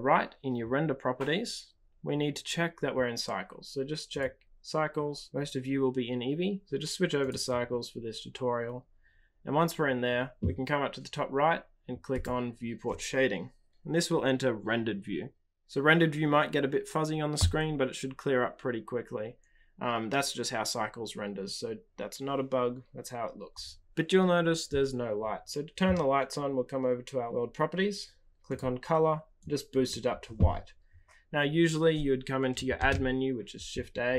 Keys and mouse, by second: 4.0-7.3 drag, 13.0 click, 32.7 shift+a.